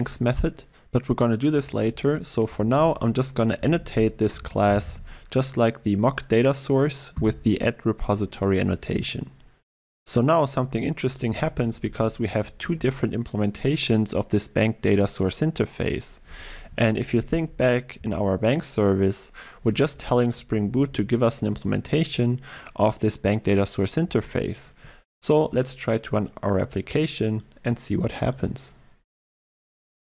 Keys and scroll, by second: 7.3 Return, 12.7 ctrl+w, 16.7 alt+1, 17.0 Down, 20.3 Down, 28.4 shift+F10.